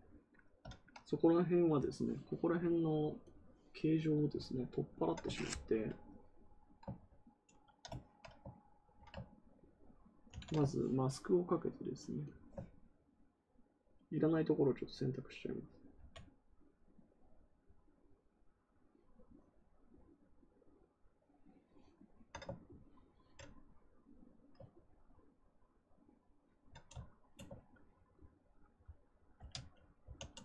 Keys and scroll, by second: 10.2 ctrl+z, 15.9 ctrl+z, 29.3 ctrl+z, 29.9 ctrl+w.